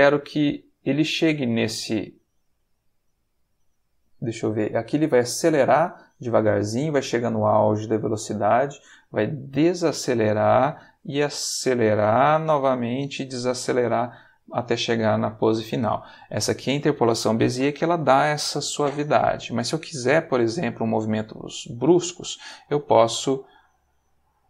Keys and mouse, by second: 22.0 click, 22.6 g.